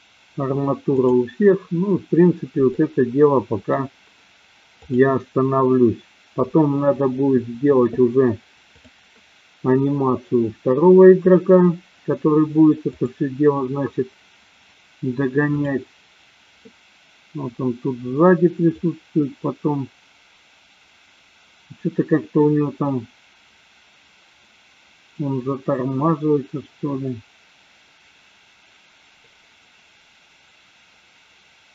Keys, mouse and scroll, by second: 0.9 click, 2.6-3.8 middle drag, 4.8 click, 13.1 click, 15.9 click, 19.1-31.7 drag.